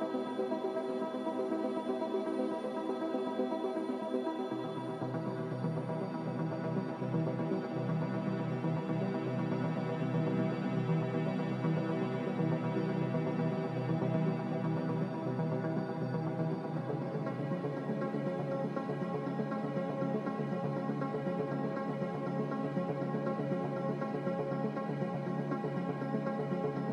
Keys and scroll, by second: 8.3 z, 10.4 a, 22.5 ctrl+c, 25.5 ctrl+v.